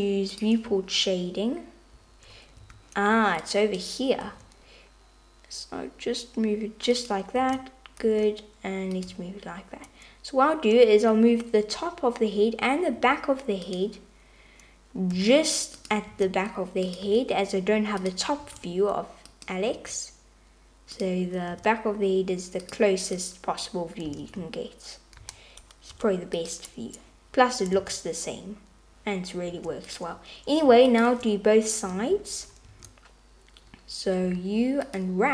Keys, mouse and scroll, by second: 0.6 click, 2.6 a, 3.5 click, 4.3 g, 7.4 a, 8.1 g, 13.0 g, 15.2 g, 16.1 s, 17.1 g, 18.4 s, 19.7 g, 21.5 s, 23.4 click, 24.1 s, 27.7 Tab, 29.6 Tab, 34.3 a, 34.3 u.